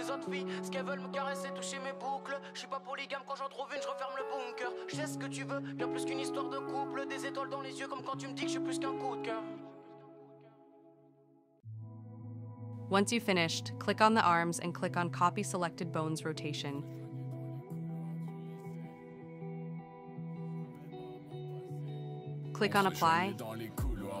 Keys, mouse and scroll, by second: 1.3-2.3 scroll up 1, 2.3 click, 4.1 click, 6.4 click, 9.0 click, 11.7-14.9 drag, 16.9-18.9 drag, 20.9-24.2 drag.